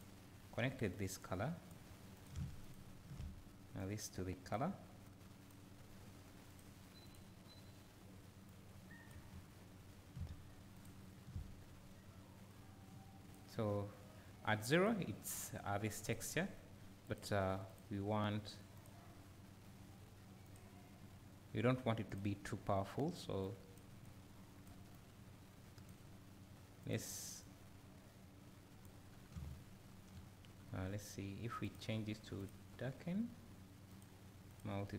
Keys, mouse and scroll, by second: 1.7-2.3 drag, 2.7 ctrl+shift+click, 3.8-5.2 drag, 7.1 click, 8.6-10.8 drag, 12.6-16.1 drag, 17.1 click, 27.5-34.9 drag, 29.1 scroll down 2, 29.3 `.